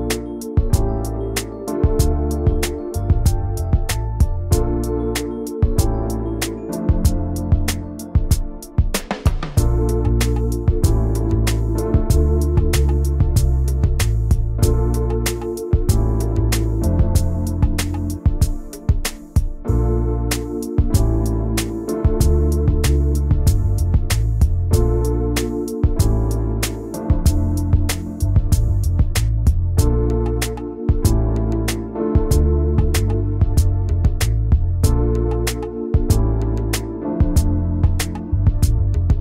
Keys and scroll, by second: 1.0 Return, 4.2 v, 16.0 ctrl+g, 17.5 l, 18.4 v, 29.9 ctrl+c, 30.7 ctrl+shift+v, 38.3 ctrl+c, 38.4 ctrl+shift+v.